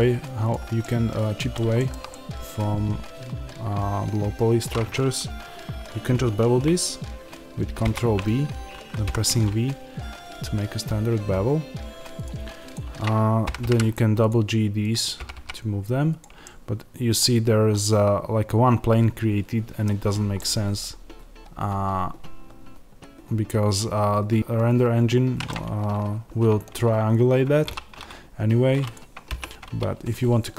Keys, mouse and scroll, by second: 0.4 click, 0.7-12.1 middle drag, 7.7 ctrl+b, 12.1 click, 13.4 g, 14.2 click, 15.1 g, 16.4-28.8 middle drag, 19.9-20.2 scroll up 2, 27.6 3, 28.8 click.